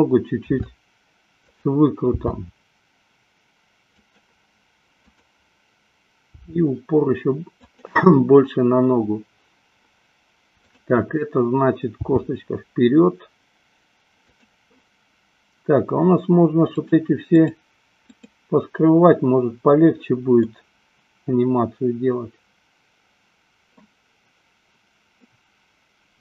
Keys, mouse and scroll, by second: 0.3 r, 2.4 g, 5.3 click, 6.6 g, 12.3 g, 16.9 click, 17.5 click, 18.4 click, 20.5-24.3 middle drag, 25.5-26.2 middle drag.